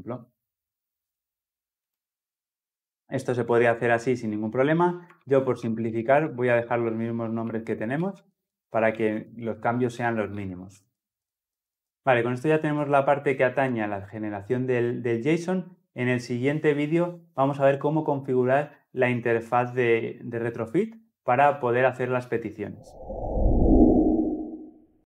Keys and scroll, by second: 0.8 Escape, 5.1 ctrl+z, 5.6 ctrl+z, 6.6 ctrl+z, 7.1 ctrl+z, 7.6 ctrl+z, 8.2 ctrl+z, 9.0 ctrl+z, 9.6 ctrl+z, 10.4 ctrl+z, 11.3 ctrl+z.